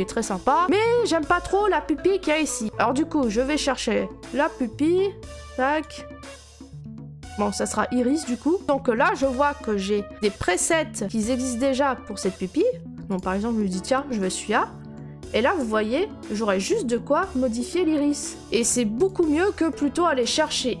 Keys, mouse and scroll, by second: 0.6 scroll, 5.8 right click, 10.5-11.1 scroll, 13.1 click, 14.6 scroll, 18.4 click, 20.0-20.8 scroll.